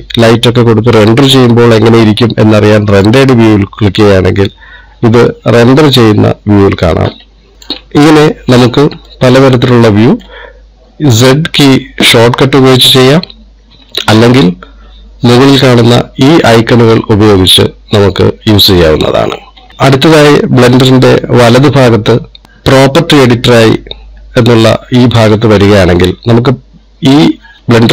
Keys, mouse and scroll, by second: 5.7 middle click, 7.5 z, 9.6 middle click, 11.7 z.